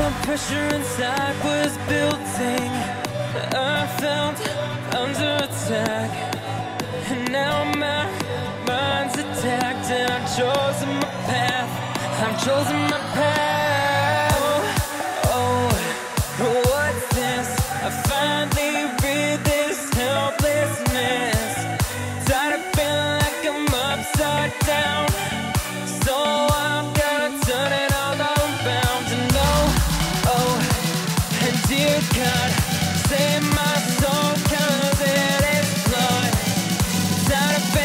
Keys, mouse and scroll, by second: 22.3 click, 32.7-36.3 drag.